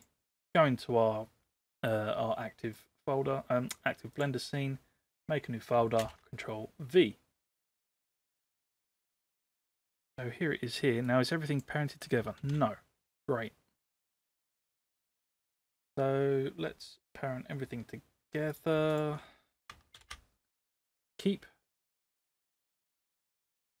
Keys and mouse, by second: 2.8 right click, 6.0 ctrl+v, 11.0 click, 12.4 ctrl+z, 14.5 click, 18.5 click, 19.9 ctrl+p, 21.8 click, 23.0 click.